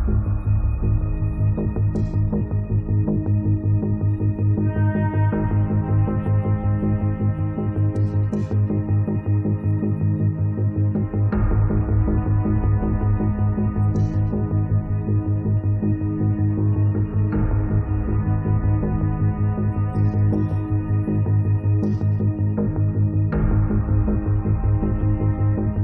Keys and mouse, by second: 0.3 middle click, 0.5 click, 0.5 right click, 1.1-2.1 middle drag, 1.2-3.0 drag, 1.2 right click, 3.1 middle click, 3.2-6.7 drag, 3.2 right click, 4.2-5.7 middle drag, 4.2-5.7 right drag, 5.8-7.8 middle drag, 5.8 right click, 6.4 right click, 7.2-10.4 drag, 7.2 right click, 8.4-9.7 middle drag, 8.5 right click, 9.8 middle click, 10.1 right click, 11.8 click, 12.4 click, 13.9 click, 14.7 click, 15.8-17.8 drag, 17.8 middle click, 17.9-22.5 drag, 23.0 middle click, 23.1-25.5 drag, 23.1 middle click, 25.1-25.8 middle drag, 25.1 right click.